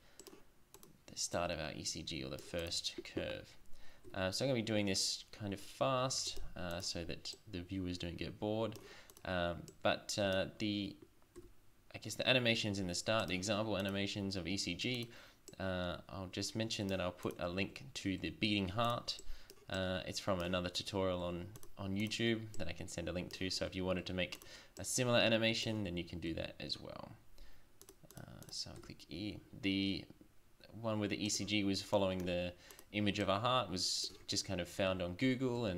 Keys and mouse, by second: 0.8 right click, 4.1 e, 6.7 click, 11.4 e, 17.6 Tab, 18.2 Tab, 20.5 Tab, 21.3 Tab, 21.8 right click, 23.6 Tab, 24.0 Tab, 25.7 Tab, 26.3 Tab, 28.8 e, 32.0 middle click, 32.7 right click, 34.1 Tab, 34.9 Tab, 35.6 Tab.